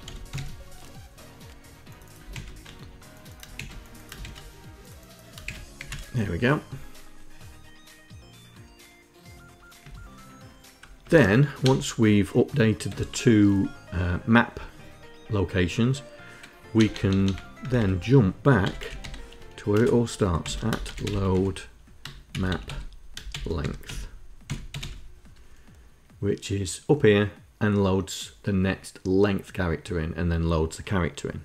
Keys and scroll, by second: 0.0-0.4 typing, 1.9 ctrl+Insert, 3.1 shift+Insert, 3.8 shift+Insert, 5.0 shift+Insert, 5.4 Down, 9.4 Down, 10.6 `, 11.2 BackSpace, 12.4 Tab, 16.3 BackSpace, 16.7 BackSpace, 17.2 Return, 17.4 Tab, 18.0-24.8 typing.